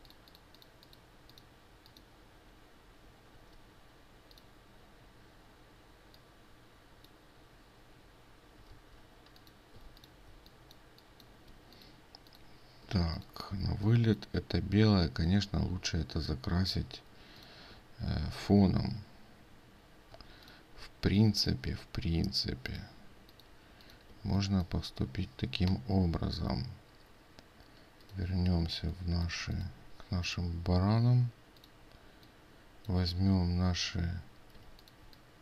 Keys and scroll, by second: 8.7 ctrl+z, 9.8 ctrl+space, 34.7 ctrl+space.